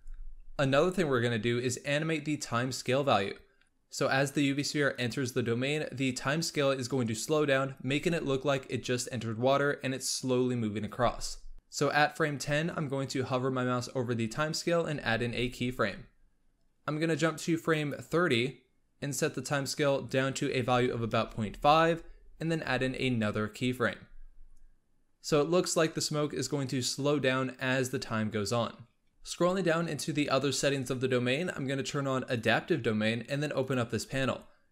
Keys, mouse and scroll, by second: 0.0 click, 17.7-22.8 drag, 29.1-29.4 scroll down 9, 30.1-32.1 scroll down 4, 32.4-34.7 drag.